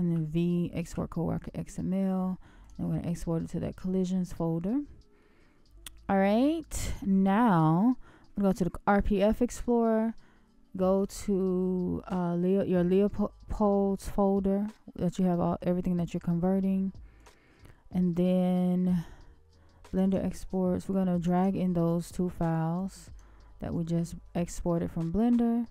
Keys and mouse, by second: 0.1 v, 4.5-5.2 middle drag.